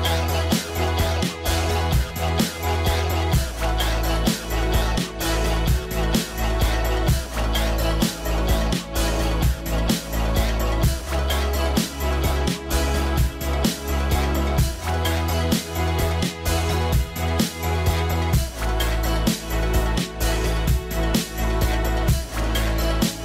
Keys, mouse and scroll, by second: 10.5-12.6 scroll down 1, 15.7 scroll down 1, 15.9-16.5 scroll up 1, 18.7-19.3 scroll up 2, 18.9 middle click, 20.6 scroll up 1, 20.7 middle click, 22.6-23.1 scroll down 1.